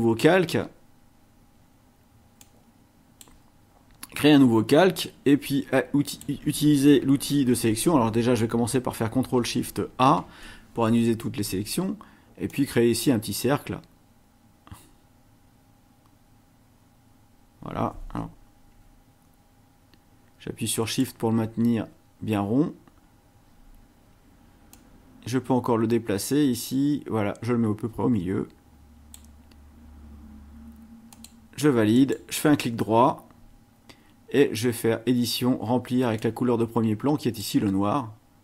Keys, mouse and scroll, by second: 2.4-3.4 drag, 6.1 click, 10.1 ctrl+shift+a, 12.5-21.2 drag, 24.7-29.3 drag, 31.1 click, 31.9 right click, 36.2-37.6 drag.